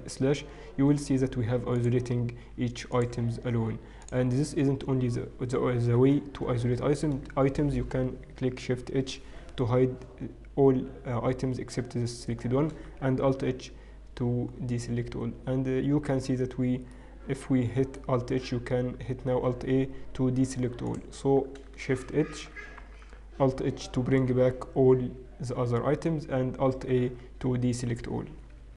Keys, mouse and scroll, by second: 0.3 KP_Divide, 1.5 KP_Divide, 2.5 KP_Divide, 2.5 click, 4.5 KP_Divide, 4.5 click, 6.1 KP_Divide, 8.9 shift+h, 14.6 alt+h, 14.6-15.4 scroll down 3, 15.4 scroll down 5, 15.6-16.0 scroll down 1, 16.8-17.3 scroll down 1, 18.1 middle click, 19.7 alt+a, 21.1 click, 22.5 shift+h, 27.2 alt+h, 27.2 alt+a.